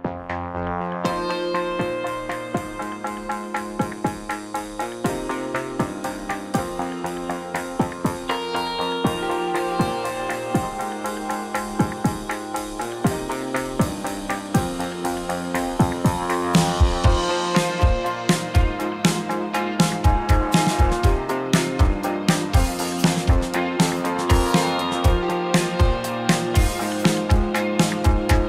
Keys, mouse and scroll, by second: 1.9-2.9 drag, 2.9 Tab, 3.3 click, 4.0 click, 5.6 click, 8.0 click, 9.3 click, 10.3 click, 12.2 space, 12.4 click, 13.9 drag, 15.0 middle click, 17.4 middle click, 18.6 middle click, 19.2 shift+a, 21.2-21.6 drag, 22.0 r, 22.7 y, 23.5 KP_9, 23.6 KP_0, 23.9 KP_Enter, 24.9-25.9 drag, 26.3 KP_7, 27.0 g, 27.3 x.